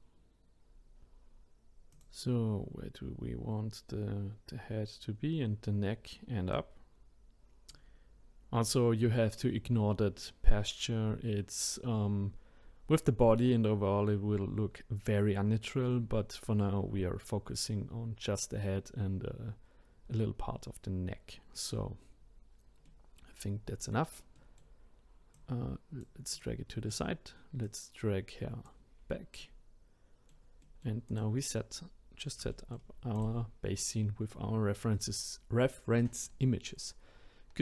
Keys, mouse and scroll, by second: 0.6-1.9 scroll down 1, 1.9 click, 6.5 click, 22.8-25.3 middle drag, 25.3 click, 26.3 click, 26.7-27.6 middle drag, 27.6 click, 29.0-29.4 scroll down 2, 29.4-31.1 middle drag, 31.1 click, 31.3 scroll down 1, 31.4-32.5 scroll up 1, 32.5-33.1 shift+middle drag, 33.1 click, 33.8-36.8 middle drag.